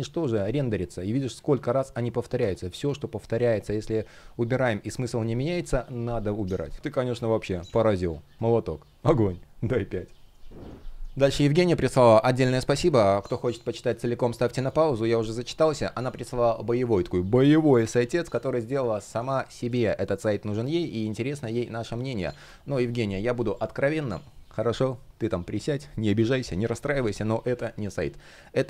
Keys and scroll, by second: 2.4 shift+p, 4.7 super+z, 20.2 space.